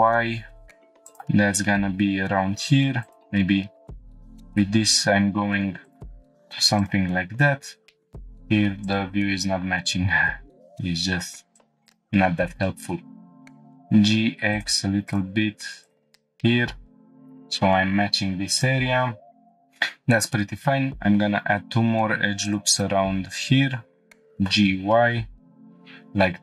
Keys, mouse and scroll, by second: 1.0-2.8 drag, 3.0 alt+click, 4.0 g, 4.5 y, 5.8 shift+click, 6.8 click, 7.6-8.1 scroll down 2, 8.8 click, 8.8 shift+middle click, 11.5 click, 11.8 shift+click, 13.2 g, 13.4 x, 14.5-14.8 drag, 15.8 shift+click, 16.6 g, 16.7 x, 17.1 click, 18.5 click, 18.8 middle click, 19.6-19.9 scroll up 3, 20.5 ctrl+r, 22.8 right click, 24.3 g, 24.5 y, 25.7 click.